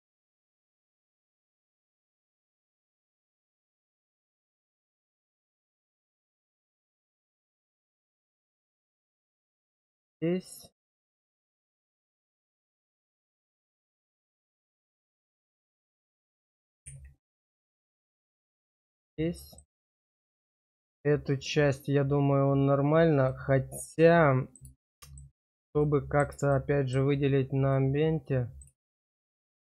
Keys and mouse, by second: 0.2 middle click, 0.9 shift+middle click, 2.7 click, 5.6 middle click, 9.6 shift+middle click, 10.1 shift+middle click, 11.5 click, 12.4 shift+click, 13.7 shift+click, 14.4 middle click, 18.3 middle click, 19.1 middle click, 20.0 shift+middle click, 23.3-24.5 middle drag, 24.8 shift+middle click, 25.7 middle click, 26.6 shift+middle click, 27.7 middle click, 28.8 shift+middle click.